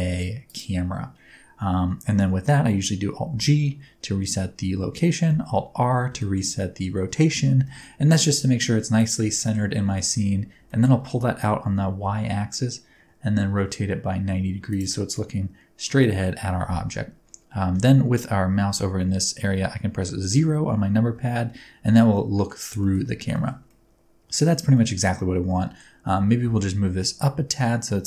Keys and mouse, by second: 3.3 alt+g, 5.2 alt+r, 5.4-6.0 drag, 5.4-6.0 middle drag, 5.4-6.0 right drag, 6.1-8.2 shift+middle drag, 6.4 click, 6.4 right click, 6.8-8.2 drag, 6.8-8.2 right drag, 7.5 g, 7.7 y, 8.9 ctrl+middle click, 9.4 shift+middle click, 10.0 shift+middle click, 10.7 shift+middle click, 11.6 r, 12.0 x, 14.6 ctrl+click, 15.2-16.0 middle drag, 20.2 KP_0, 22.1-22.5 middle drag, 22.8 middle click, 23.3 shift+middle click, 23.7-24.3 middle drag, 24.7 shift+middle click, 25.2-25.8 middle drag, 26.1 g, 26.4 z.